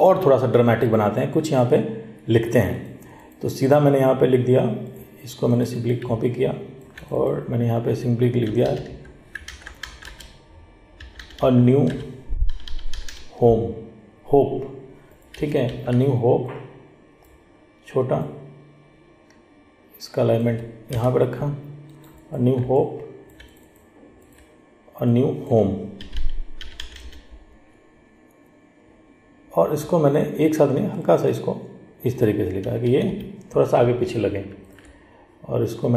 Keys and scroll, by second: 9.6 ctrl+a, 15.9 ctrl+t.